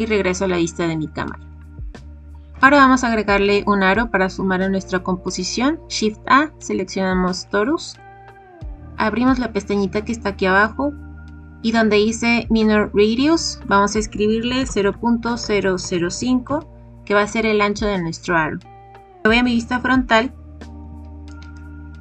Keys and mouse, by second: 2.6 shift+a, 10.5 click, 13.6-17.1 drag, 20.8 KP_1.